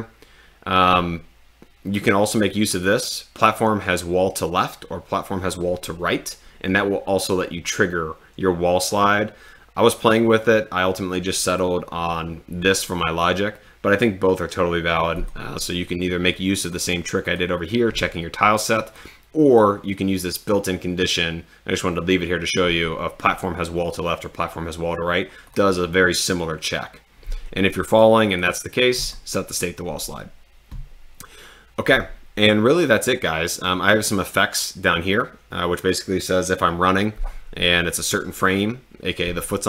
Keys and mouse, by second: 11.5 click, 17.3 click, 19.4 click, 25.5 click.